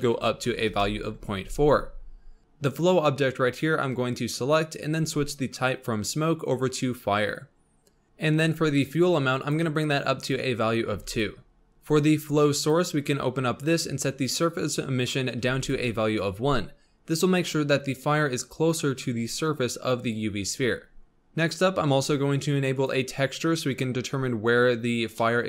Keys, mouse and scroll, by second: 5.4-8.0 drag, 9.4-11.2 drag, 11.7-15.7 drag, 21.0 scroll down 4, 22.7 click, 23.2-23.5 scroll down 4, 25.1-25.4 middle drag.